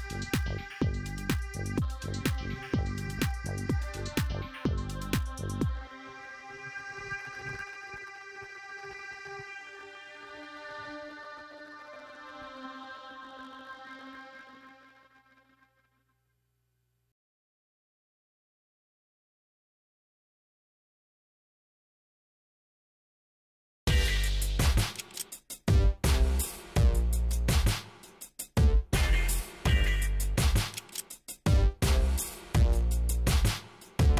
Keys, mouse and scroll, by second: 2.7 shift+right click, 8.3 click, 9.7 click, 12.1 middle click, 13.4 click, 14.6 click, 15.0 scroll up 2, 15.5 middle click, 17.6 click, 19.7 click, 20.3 click, 20.7 right click, 21.2 click, 22.0 click, 25.5 KP_5, 26.5 click, 27.6 KP_5, 27.9 KP_Enter, 30.0 click, 31.4 click, 32.5 click, 33.7 KP_6, 33.9 KP_Enter.